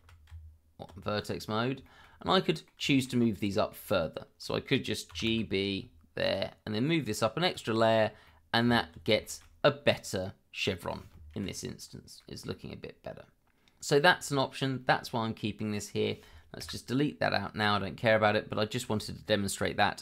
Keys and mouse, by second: 1.8 shift+middle click, 2.5 middle click, 2.9 shift+middle click, 3.5 middle click, 5.1 g, 5.3 b, 6.2 click, 7.5 click, 8.2 middle click, 8.6 Tab, 9.2 shift+middle drag, 10.2-10.8 middle drag, 11.3 KP_Divide, 12.2-14.0 middle drag, 16.6 Delete, 17.9 shift+middle drag.